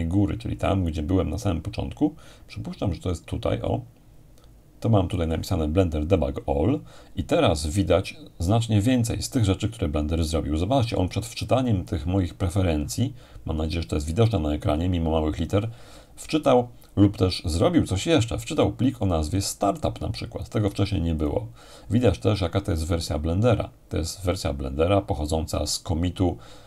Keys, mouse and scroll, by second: 11.9-15.3 drag, 18.6-22.2 drag, 25.7-26.6 drag.